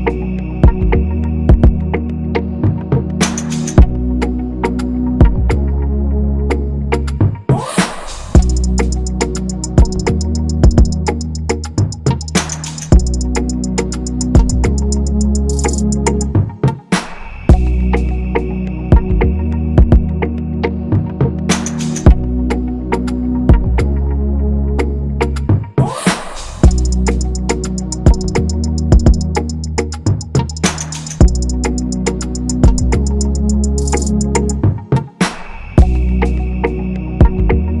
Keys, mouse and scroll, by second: 2.1-2.9 typing, 6.1 ctrl+=, 7.2-8.4 typing, 7.9-8.4 scroll down 1, 9.9 scroll down 1, 10.1-10.6 scroll, 10.6 typing, 11.0 scroll down 1, 11.2-11.9 scroll, 11.9 typing, 12.5 scroll up 1, 12.9 scroll, 13.6 typing, 15.0-15.5 scroll, 15.2-16.0 typing, 18.0 ctrl+0, 20.8 shift+click, 25.4 alt+click, 26.8 shift+click, 32.2 shift+Up.